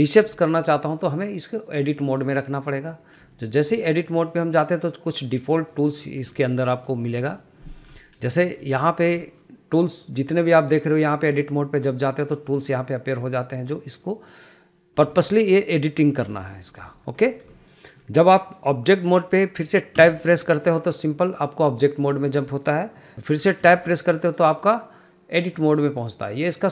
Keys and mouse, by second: 0.5 shift+middle click, 1.4-2.9 drag, 3.5 shift+middle click, 3.9 middle click, 4.4 click, 5.8 click, 6.5 shift+middle click, 6.8 middle click, 7.3 shift+middle click, 7.7 shift+middle click, 8.1 middle click, 8.4 shift+middle click, 9.0 shift+middle click, 15.4 shift+middle click, 16.5 shift+middle drag, 17.0 shift+middle click, 17.3 middle click, 17.7 shift+middle click, 18.0 shift+middle click, 20.1 Tab, 23.9 Tab.